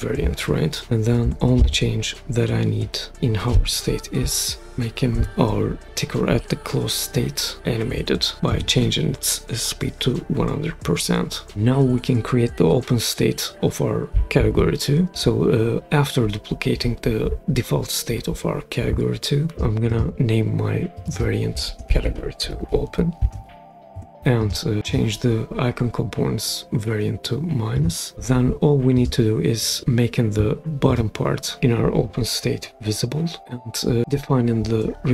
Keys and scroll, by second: 4.2 Left, 4.6 1, 5.1 0, 8.5 Return, 15.1 super+d, 21.5-24.0 typing.